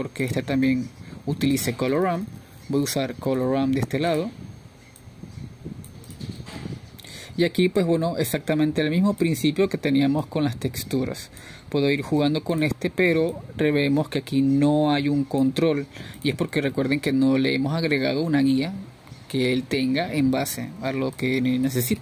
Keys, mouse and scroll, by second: 6.7 shift+a, 9.2 click, 9.5 click, 11.2-15.0 drag, 15.0-15.9 scroll up 1, 15.9-18.9 drag, 18.9-19.5 scroll down 1, 19.5 click.